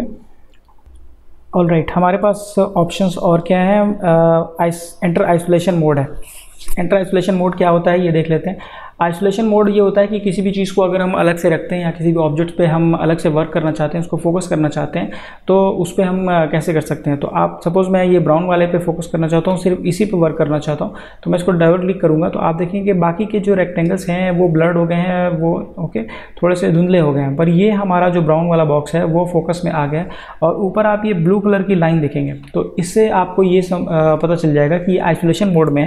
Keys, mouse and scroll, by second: 8.6 click, 18.4 click, 21.3 click.